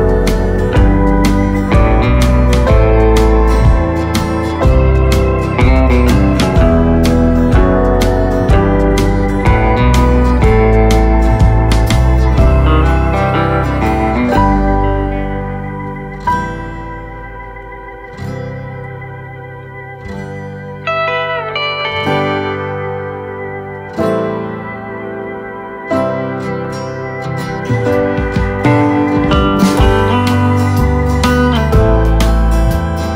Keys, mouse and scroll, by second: 0.2 click, 0.6 middle click, 1.1-1.5 scroll down 3, 1.5-4.2 middle drag, 4.2 click, 4.6 middle click, 5.4 click, 7.4 click, 11.5 click, 13.5 click, 16.6-19.0 drag, 19.0 middle click, 19.6 space, 20.0 space, 20.2-21.3 middle drag, 21.3 click, 21.9-23.0 middle drag, 23.0 click, 25.8 click, 28.4 click, 28.9 click.